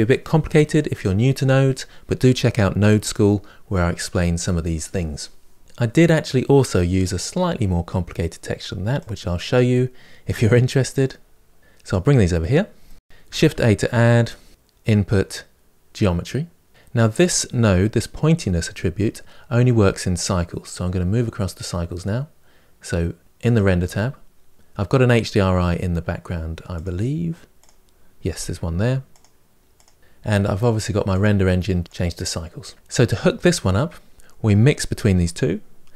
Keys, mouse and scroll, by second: 8.8-10.1 drag, 10.2-11.8 drag, 21.8-23.4 drag, 26.6-30.0 drag, 30.9-35.9 drag.